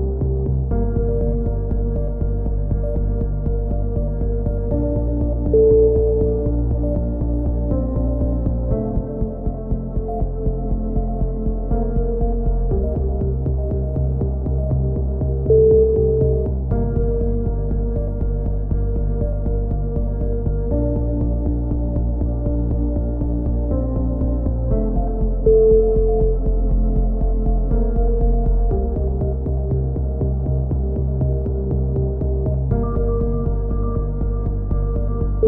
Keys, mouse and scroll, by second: 0.4-1.5 drag, 1.6 a, 1.9 z, 2.7 Tab, 5.4-7.1 drag, 5.7 Tab, 10.6 middle click, 11.2-12.8 drag, 12.8-14.2 middle drag, 12.8 z, 13.5 c, 14.2 click, 14.3 middle click, 14.9 click, 14.9 w, 16.0 click, 16.9 f, 17.1 a, 17.2 z, 17.5 Tab, 20.7-22.0 middle drag, 22.0-23.1 drag, 25.2 Tab, 25.5 z, 25.7 middle click, 26.4 click, 28.2 a, 28.5 z, 28.6 middle click, 29.5 click, 33.0 middle click, 33.2 click.